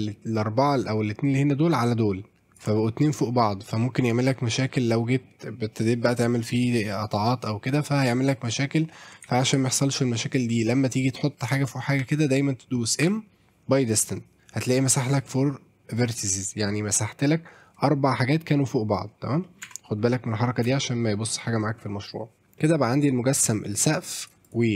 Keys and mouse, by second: 1.4-2.6 drag, 9.3 ctrl+z, 10.4 click, 10.5 ctrl+click, 12.0 a, 13.0 m, 19.4 middle click, 19.7 Tab, 20.7 shift+middle click, 21.1 middle click, 22.4 KP_7, 22.6-23.4 middle drag, 23.8-24.3 drag, 24.4 click.